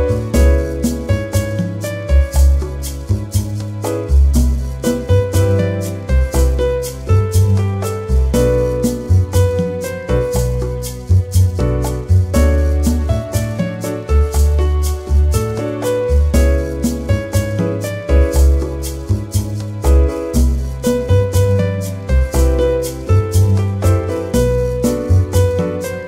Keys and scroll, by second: 9.0 ctrl+z, 21.1 ctrl+-.